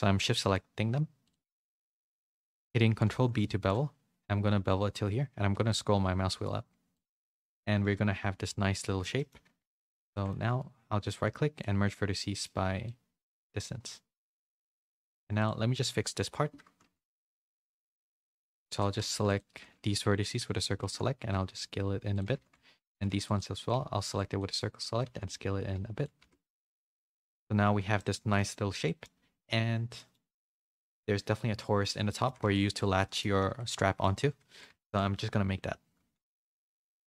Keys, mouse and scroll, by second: 1.4 middle click, 2.4 shift+click, 3.0 ctrl+b, 7.3 middle click, 8.8 shift+middle click, 9.8 1, 9.8 a, 10.1 shift+middle click, 10.4-11.6 right drag, 11.8 middle click, 12.8-14.3 middle drag, 14.7 middle click, 15.1 3, 15.3 click, 16.8-19.5 typing, 20.7 s, 22.2 a, 22.4 a, 23.0 c, 23.6 c, 24.9 s, 26.1 z, 26.5 Tab, 26.7 a, 26.9 a, 27.0 middle click, 27.8 a, 27.9 middle click, 28.8 middle click, 30.0 middle click, 32.0 middle click, 32.3 a, 32.4 a, 32.7 middle click, 33.5 a, 33.5 a, 33.6 middle click, 34.2 a, 34.4 a, 36.8 shift+a.